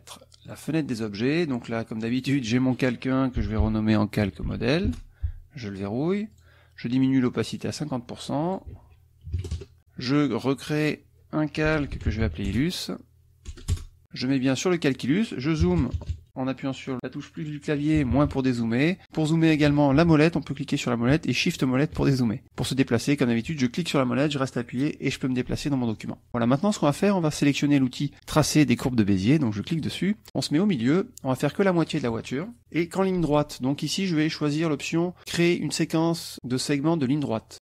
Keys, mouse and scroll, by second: 0.5 click, 2.0 click, 3.1-5.0 typing, 6.3 click, 7.5 click, 8.5 ctrl+click, 8.7 ctrl+a, 9.3 ctrl+KP_5, 9.4 ctrl+KP_0, 9.5 ctrl+KP_Enter, 10.8 click, 11.4-13.5 typing, 13.7 Return, 14.3 click, 15.7 KP_Add, 18.0 KP_Subtract, 19.0 click, 19.8 click, 21.4 shift+click, 22.4 shift+click, 22.5 click, 23.6-26.1 drag, 29.7 click.